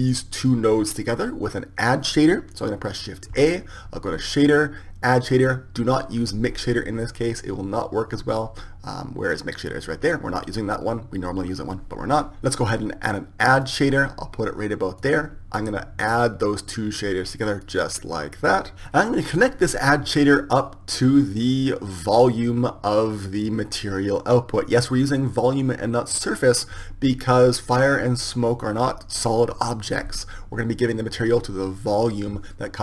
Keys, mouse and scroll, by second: 3.3 shift+a, 16.4-18.8 drag, 21.8-23.6 drag.